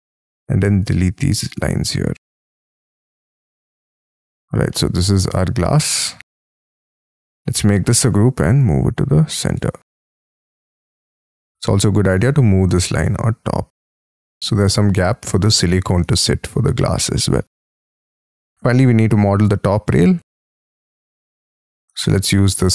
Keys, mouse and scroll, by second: 0.0-0.2 typing, 1.6-2.0 scroll down 13, 3.3 space, 3.5-3.9 scroll up 4, 3.9 scroll down 5, 4.7 shift+middle click, 5.5-6.6 scroll up 12, 7.4 g, 7.7 scroll up 3, 8.0 m, 9.5 space, 10.0 middle click, 10.9 space, 11.3 double click, 11.7 double click, 12.1 m, 13.0 m, 14.1 shift+click, 14.7 j, 15.2 space, 15.5 Escape, 15.7 Escape, 16.0 Escape, 16.2-17.5 scroll down 26, 17.7 middle click, 18.6-18.9 scroll up 3, 18.9-19.4 scroll down 4, 19.4-19.8 scroll up 1, 20.2 Escape, 20.4-21.8 scroll up 19, 21.8 c.